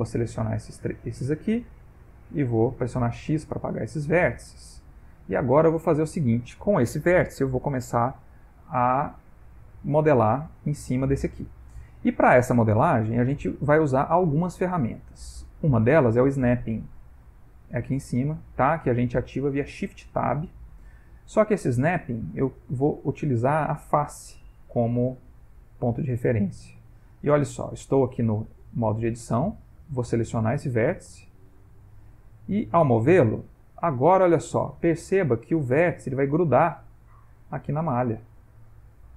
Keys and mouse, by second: 0.4 shift+click, 1.2 x, 3.5 click, 4.5 middle click, 5.7 Tab, 8.3 middle click, 15.3 middle click, 21.1 click, 22.6 click, 25.2 middle click, 26.1 ctrl+middle click, 28.1 Tab, 29.6 a, 31.4 click, 32.2 g, 37.6 middle click.